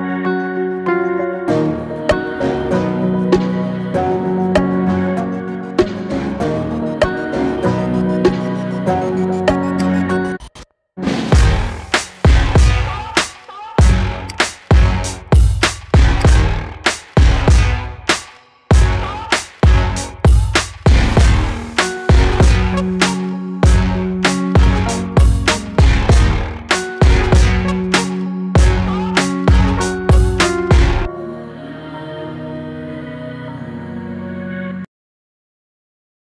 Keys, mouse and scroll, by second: 7.6-8.0 scroll up 1, 8.0 scroll down 1, 8.9-9.5 shift+middle drag, 9.5-9.9 scroll up 1, 9.9 click, 10.8 scroll down 2, 11.1-11.5 shift+middle drag, 11.5 click, 11.9 scroll up 2, 13.9-14.3 scroll down 2, 14.3-14.9 drag, 14.9-15.8 scroll down 2, 15.8 click, 16.5 click, 17.4-18.6 shift+middle drag, 18.6 scroll up 1, 18.9-19.5 shift+middle drag, 19.5 click.